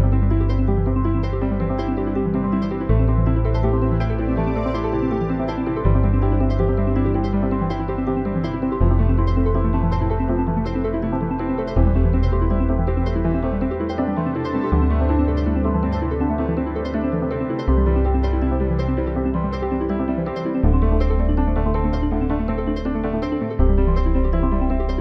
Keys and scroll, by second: 1.1 Return.